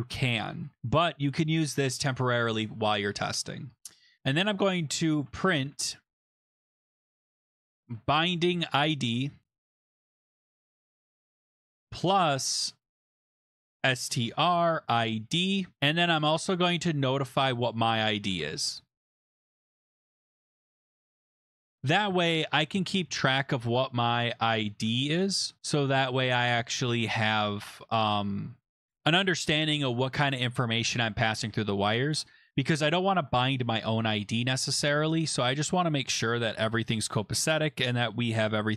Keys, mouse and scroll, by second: 3.8 Return, 4.8-11.5 typing, 13.1-22.2 typing, 15.7 Escape, 20.2 Right, 22.6 Left, 22.7 Left, 22.9 Left, 23.1 Left, 23.2 Left, 23.3 Left, 23.9 Left, 24.2-25.6 typing, 25.8 Right, 25.9 Right, 26.1 Right, 26.2 Right, 26.4 Right, 26.6 Right, 26.7 Right, 26.9 Right, 27.3-28.0 typing, 30.7 Return, 34.8 click, 37.6 click, 38.2-38.7 scroll down 7.